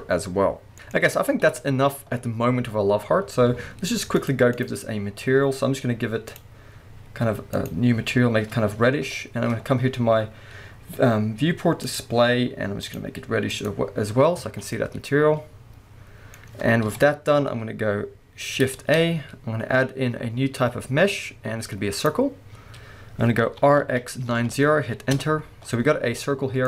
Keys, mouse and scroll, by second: 1.4 KP_1, 4.1 click, 5.0-5.3 scroll down 1, 5.3-6.3 scroll up 1, 6.3 click, 9.1-11.8 scroll down 1, 11.8-12.9 drag, 12.2-12.8 scroll down 1, 14.3 scroll down 1, 14.5 alt+a, 14.7-16.8 middle drag, 16.8 KP_1, 17.5-18.8 scroll up 1, 18.8 shift+a, 26.1 g.